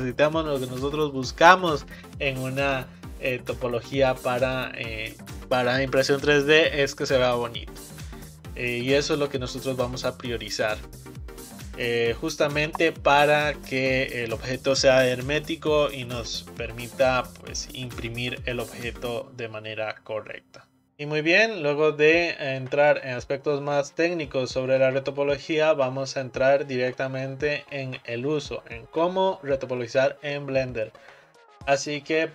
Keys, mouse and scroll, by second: 8.8 click, 11.9-14.9 middle drag.